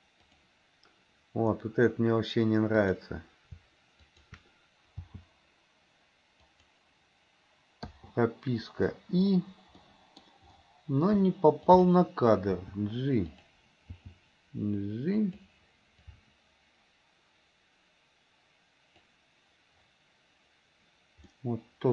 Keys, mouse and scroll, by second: 0.3 click, 2.8 click, 4.0 shift+click, 5.0 g, 8.0 i, 9.9 middle click, 11.7 click, 12.7 g, 14.0 g, 16.2-19.9 drag, 21.6 middle click.